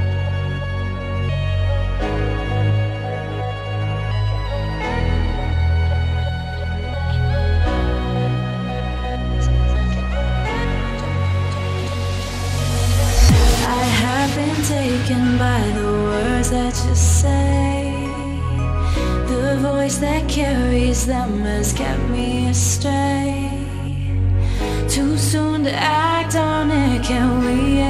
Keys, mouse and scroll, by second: 0.1 ctrl+click, 3.9 ctrl+click, 4.8 click, 7.9 ctrl+click, 8.6 click, 12.5 ctrl+click, 13.4 click, 15.6 click, 17.7 space, 17.8 click, 18.0 space, 20.8 click, 23.3 shift+click, 25.1-27.6 drag.